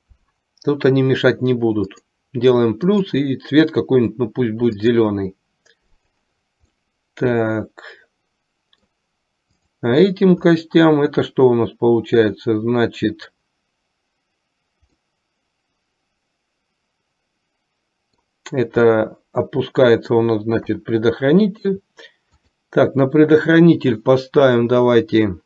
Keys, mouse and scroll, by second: 2.1 click, 2.9-5.3 drag, 6.0 click, 6.9-9.0 middle drag, 10.5-12.4 middle drag, 15.1-18.3 middle drag, 19.0-20.4 middle drag, 20.8 KP_3, 22.5-25.4 drag.